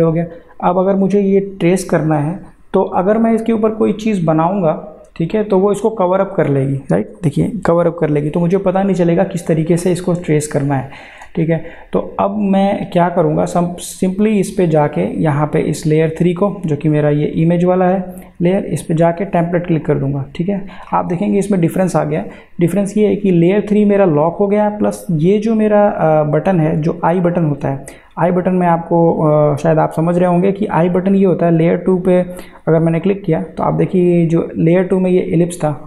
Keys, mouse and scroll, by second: 5.3 click, 10.2 click, 10.5 ctrl+z, 14.7 click, 18.5 click, 33.0 click.